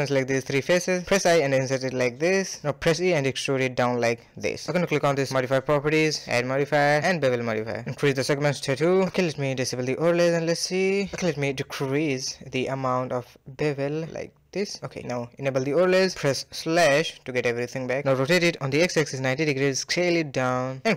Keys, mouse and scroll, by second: 2.2 middle click, 2.7 e, 7.0 click, 8.1 click, 9.3 click, 10.0 middle click, 10.5 scroll up 2, 10.7-12.3 middle drag, 12.3-14.1 shift+drag, 14.8 /, 16.0 click, 17.1 Tab, 17.8 r, 19.0 s, 19.1 KP_Decimal, 19.6-20.0 scroll down 5, 20.0-20.6 shift+middle drag, 20.6 g.